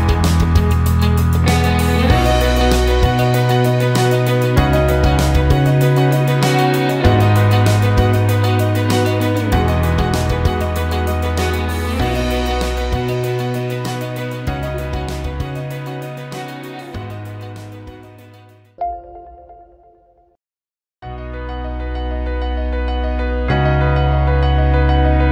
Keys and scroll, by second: 15.6 7, 15.9 Return, 18.5-19.7 typing.